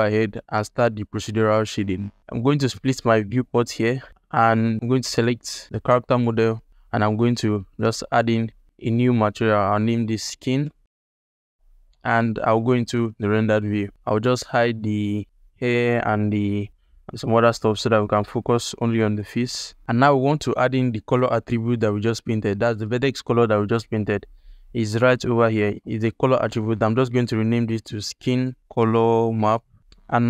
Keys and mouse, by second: 2.2 ctrl+Tab, 3.1 click, 4.2 ctrl+click, 5.1 alt+click, 7.4 ctrl+alt+click, 9.0 click, 9.6 BackSpace, 10.9 alt+shift+click, 11.5 ctrl+alt+click, 12.4 z, 16.7 click, 17.9 ctrl+alt+click, 18.2 ctrl+alt+middle click, 18.8 shift+click, 19.0 alt+shift+middle click, 19.6 ctrl+alt+click, 24.3 click, 25.7-29.6 drag, 30.1 ctrl+alt+middle click.